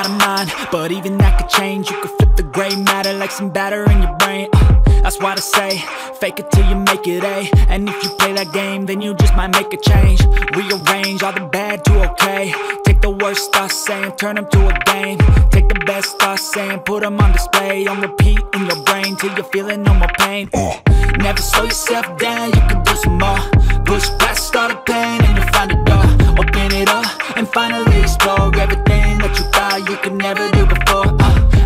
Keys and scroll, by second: 14.1 ctrl+alt+shift+e.